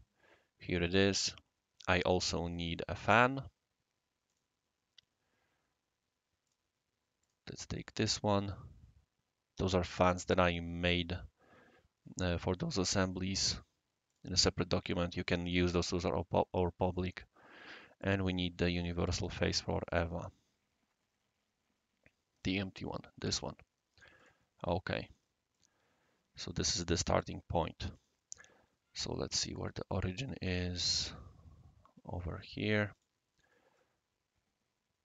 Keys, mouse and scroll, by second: 0.9 click, 2.5 click, 4.2 click, 6.4 click, 7.2 click, 14.0 click, 18.0 click, 19.0 click, 20.0 scroll up 1, 20.1-20.4 scroll down 3, 21.2 scroll down 1, 22.4 click, 24.1 click, 24.7 scroll down 2, 25.5-26.8 drag, 27.1 click, 27.9 click, 29.4 click, 29.9-32.4 right drag, 32.9 click, 33.8-35.0 drag.